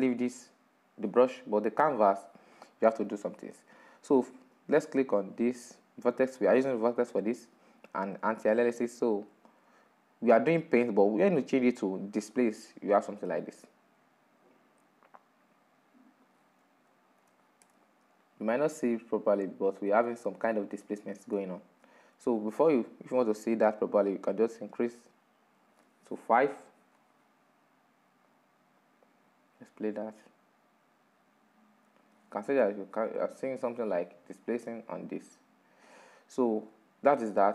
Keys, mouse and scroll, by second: 1.0-2.4 scroll down 2, 2.4-4.0 scroll up 1, 4.0 right click, 5.7-7.4 shift+middle drag, 7.4 click, 10.5-12.1 scroll down 3, 12.1-15.1 drag, 15.7-19.1 drag, 19.1 scroll up 5, 19.7-22.0 shift+middle drag, 22.0-22.4 scroll up 3, 22.4-24.2 shift+middle drag, 24.2-24.7 scroll down 3, 24.7 shift+middle click, 25.6-27.0 scroll down 1, 27.0-30.1 drag, 30.5-34.1 drag, 34.2-34.8 drag, 34.8-35.8 middle drag, 35.8-36.3 scroll down 3, 36.3-37.5 middle drag.